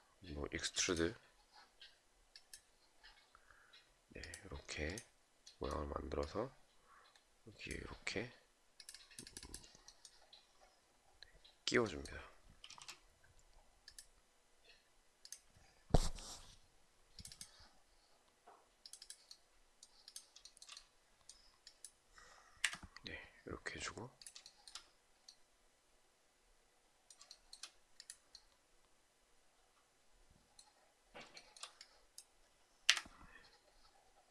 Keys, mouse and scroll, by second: 12.2 space, 20.0 shift+right click, 20.1 shift+double right click, 22.1 Delete, 24.0 shift+right click, 26.8 shift+right click, 30.9 shift+right click, 32.4 Delete.